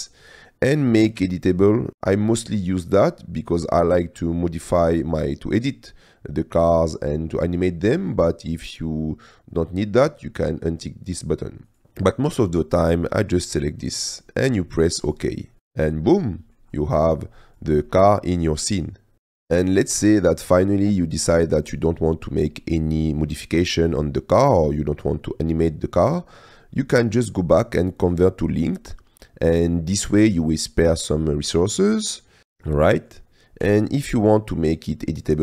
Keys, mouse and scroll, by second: 16.0-16.6 drag, 17.9-19.3 drag, 19.5 click, 21.4 click, 22.9-24.8 drag, 29.2 click, 30.2-31.2 drag, 31.8-32.4 drag, 32.8 click, 33.6 click.